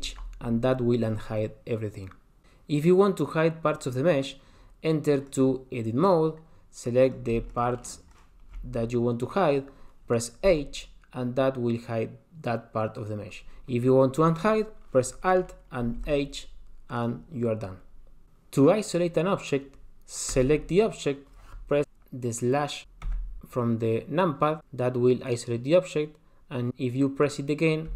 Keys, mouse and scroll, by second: 0.1 alt+h, 5.3 click, 7.0 click, 7.5 shift+click, 7.8 shift+click, 8.1 shift+click, 10.4 h, 15.8 alt+h, 16.9 click, 18.2-18.9 scroll down 2, 20.3 click, 23.2 KP_Divide.